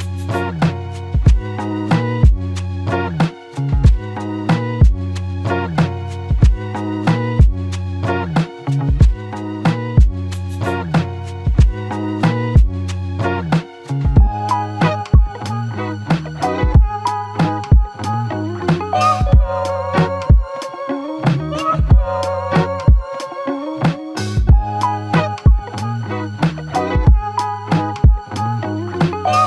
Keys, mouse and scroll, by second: 6.9 typing, 8.6 typing, 11.7 typing, 15.3 typing, 24.7 typing, 24.9 alt+click.